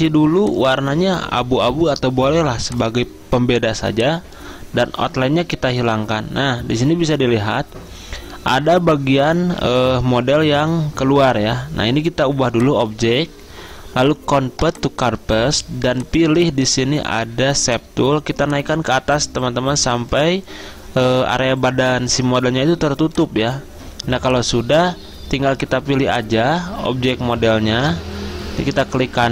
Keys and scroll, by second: 27.9 ctrl+z.